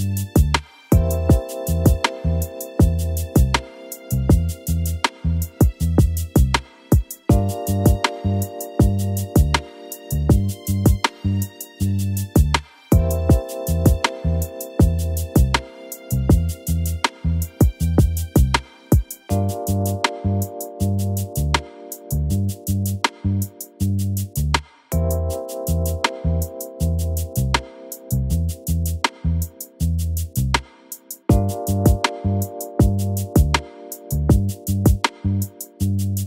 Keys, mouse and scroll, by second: 0.1 g, 1.4 click, 1.8-2.1 scroll down 1, 2.1 click, 2.9 click, 3.3 KP_1, 4.6 shift+d, 7.1 KP_3, 7.4-8.0 scroll up 4, 8.0 click, 8.5 g, 9.7-10.3 scroll up 1, 10.3 click, 10.7-11.1 scroll up 2, 11.1 click, 11.5-11.9 scroll up 2, 11.9 click, 12.5 e, 13.9 click, 14.3-15.1 scroll down 5, 15.1 KP_1, 15.4-15.9 scroll down 1, 16.0 KP_3, 17.1 l, 17.4 KP_7, 18.3 shift+d, 19.6 click, 21.8 click, 22.6 click, 23.6 click, 25.6 KP_1, 27.1 click, 28.0 click, 28.8 v, 29.6 click, 29.9 click, 30.3 click, 31.1 v, 32.5 z, 32.9 click, 33.9 click, 34.4 l, 34.6 l, 35.3 l, 35.6 h.